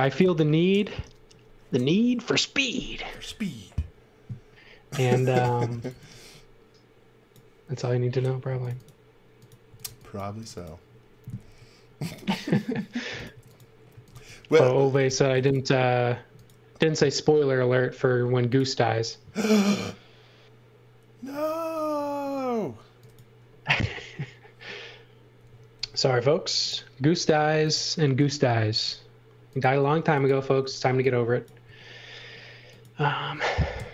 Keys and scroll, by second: 0.2 v, 5.4-6.4 typing, 8.5-10.4 typing, 11.4 l, 13.3-15.0 typing, 18.0 f, 25.8 l, 30.6 e, 31.6 space, 33.7 Delete.